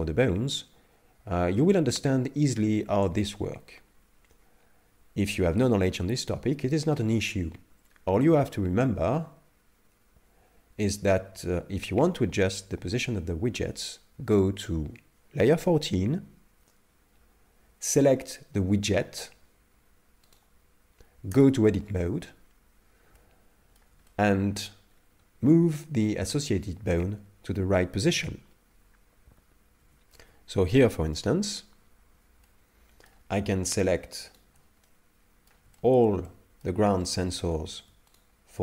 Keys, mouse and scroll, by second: 20.3 right click, 21.3 Tab, 23.1 middle click, 24.1 shift+middle click, 25.0-26.2 scroll up 1, 26.2 scroll up 1, 29.8 Tab, 31.8 KP_Divide, 32.4 middle click, 34.3 shift+right click, 34.9 middle click, 35.8 shift+middle click, 36.2 middle click, 36.9 shift+middle click, 37.4 scroll up 2, 38.3 shift+right click.